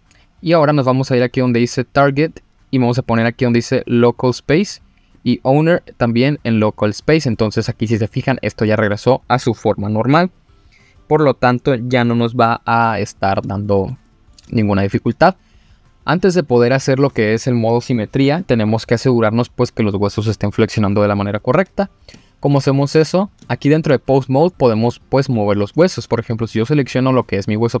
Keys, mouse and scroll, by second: 0.9-2.1 drag, 2.2 click, 2.7-4.2 drag, 5.1-6.1 drag, 6.9-7.3 scroll down 1, 7.3-7.7 middle drag, 8.7-9.1 middle drag, 12.5-13.4 scroll down 2, 13.5-13.9 shift+middle drag, 14.0-14.3 middle drag, 14.5-14.9 shift+middle drag, 21.6-22.2 scroll down 3, 22.2 shift+middle drag, 22.7-23.1 scroll up 3, 23.5-23.8 shift+middle drag, 24.6 middle drag, 25.3 click, 26.4-26.8 middle drag, 27.3-27.6 scroll up 1.